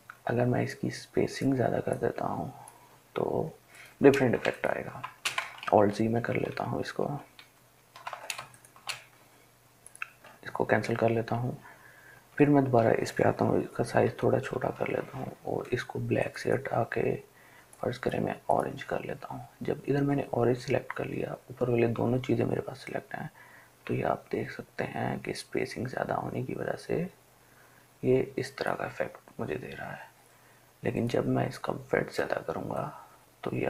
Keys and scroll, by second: 5.8 ctrl+alt+z, 6.1 ctrl+alt+z, 6.3 ctrl+alt+z, 13.8-14.8 typing.